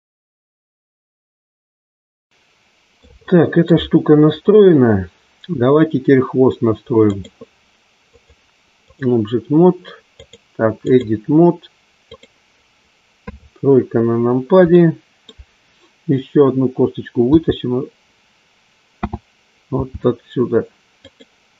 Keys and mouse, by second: 1.3 middle click, 1.7 shift+middle click, 2.4 middle click, 3.3-4.7 shift+middle drag, 7.1 click, 8.1-9.1 drag, 10.5 click, 12.2 click, 13.2 KP_3, 14.8 middle click, 18.9 t, 19.8 r.